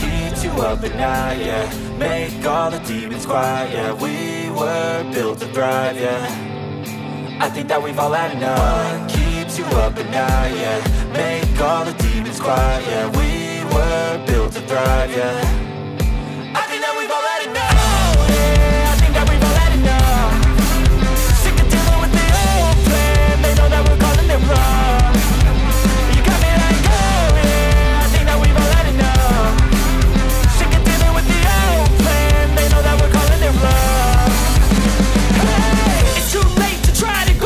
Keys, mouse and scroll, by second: 0.0 ctrl+z, 7.8 space, 13.4 right click, 18.8 ctrl+z, 24.1 space, 27.9 space.